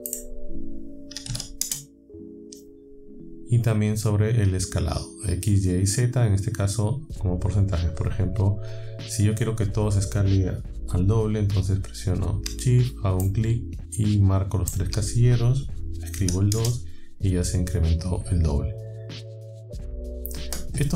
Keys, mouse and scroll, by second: 0.1 click, 1.2 KP_4, 1.3 KP_5, 1.6 KP_Enter, 13.2-14.9 shift+drag, 16.2 KP_2, 16.6 KP_Enter, 19.8 click.